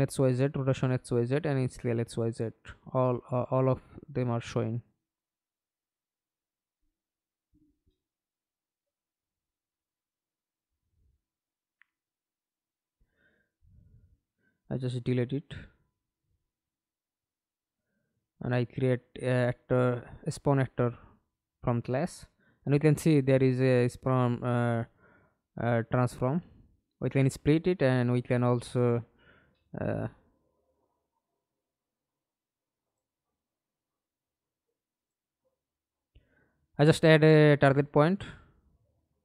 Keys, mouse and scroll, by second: 0.2 alt+p, 3.5 Escape, 4.0 middle click, 4.8 F11, 6.4 double click, 7.5 scroll down 2, 7.8-8.1 scroll up 4, 8.8 alt+click, 11.7 double click, 13.9 Delete, 14.7 right click, 15.2 right click, 16.3-18.9 typing, 19.1 Up, 19.4 Return, 22.0 right click, 25.2 right click, 25.8 right click, 34.1 double click, 34.4 double click, 35.3-36.4 typing, 37.2-38.2 scroll down 9, 38.5 alt+click.